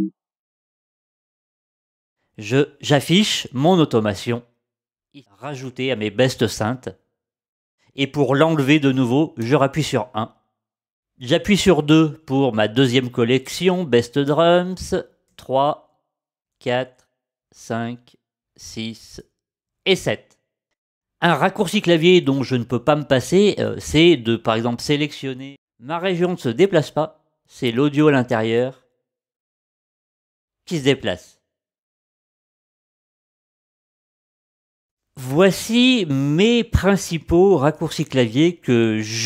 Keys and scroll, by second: 1.4 a, 9.4 l, 11.5 2, 14.3 2, 15.3 3, 16.4 4, 17.4 5, 18.3 6, 19.7 7.